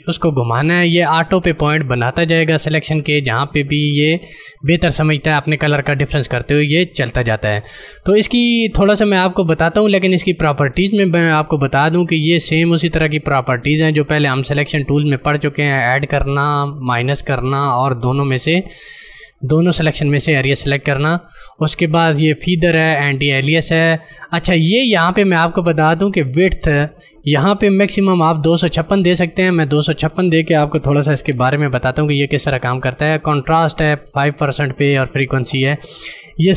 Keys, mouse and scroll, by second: 29.5 click.